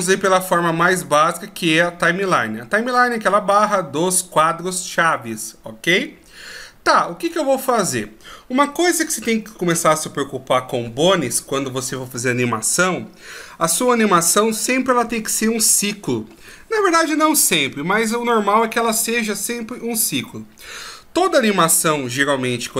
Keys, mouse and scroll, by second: 7.0-10.2 scroll down 1.